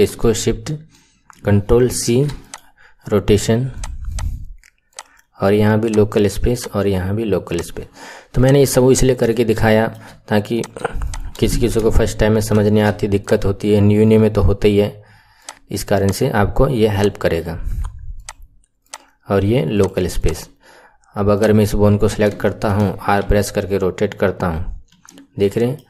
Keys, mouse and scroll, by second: 1.8 ctrl+shift+c, 3.8 click, 4.1 click, 4.8-8.4 drag, 9.1-9.6 scroll down 2, 9.6 shift+middle click, 10.5 click, 11.0 shift+click, 12.5 ctrl+shift+c, 15.4-16.1 drag, 16.9-20.2 drag, 21.3 click, 21.9 KP_1, 22.4 shift+middle click, 23.2 r, 25.4-25.8 middle drag.